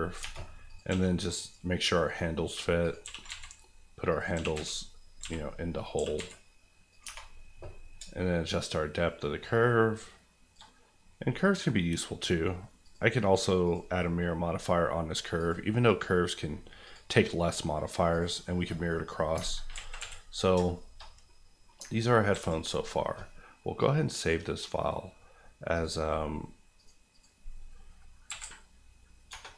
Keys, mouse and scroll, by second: 0.2 Tab, 0.6 click, 0.9 g, 1.4 click, 1.6 middle click, 2.0 scroll up 1, 2.8 click, 3.0 g, 3.2 z, 4.1 click, 4.3-6.1 typing, 5.8 click, 6.9 click, 7.0 Tab, 7.9 shift+Tab, 8.4-10.6 shift+drag, 10.6 click, 10.7 scroll down 1, 11.2-12.8 scroll up 2, 11.3 middle click, 12.8 click, 18.9 middle click, 19.3 alt+middle click, 19.7 alt+a, 20.0 KP_1, 20.6 shift+KP_1, 20.7 shift+middle click, 21.0 middle click, 21.8 ctrl+middle click, 22.3 ctrl+s, 23.8 click, 28.3 Right, 28.4 a, 29.3 BackSpace.